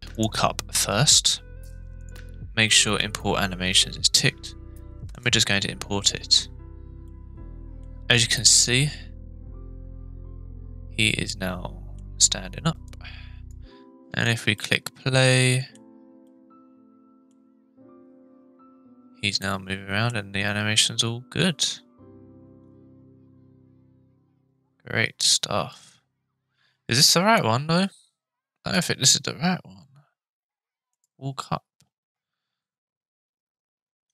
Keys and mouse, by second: 7.0-7.8 middle drag, 8.4-12.0 middle drag, 12.8 click, 14.0 space, 14.5-15.8 middle drag, 16.3 middle click, 19.5-20.1 shift+middle drag, 25.5 space, 28.5 space, 28.7-31.1 drag.